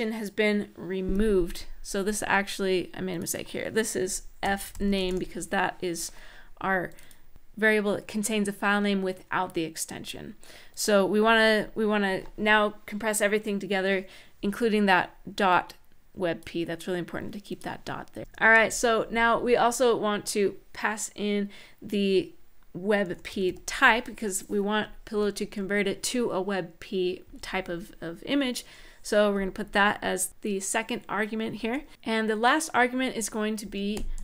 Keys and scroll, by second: 3.9-5.3 typing, 18.2 shift+', 19.3 typing, 22.5-23.7 typing, 24.9 Tab, 27.0 ,, 33.1-34.2 typing.